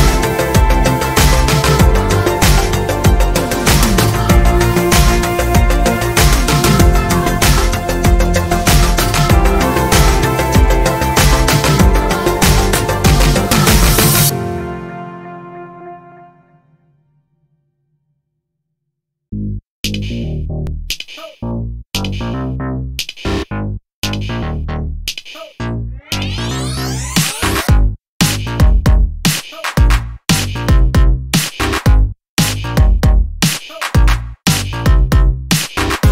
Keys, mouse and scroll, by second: 0.3 Up, 0.5 Right, 1.2 Up, 3.5 click, 3.9 click, 4.5 click, 5.7-6.1 ctrl+scroll down 2, 6.6 ctrl+space, 7.5 ctrl+middle click, 8.5 scroll down 2, 9.2 space, 12.2 ctrl+d, 12.6 ctrl+click, 14.6 ctrl+click, 15.7 click, 17.4-20.7 ctrl+shift+drag, 22.9 click, 24.3-26.6 drag, 27.1 click, 28.0-32.1 drag, 33.0 ctrl+shift+click, 34.1-36.1 ctrl+shift+drag.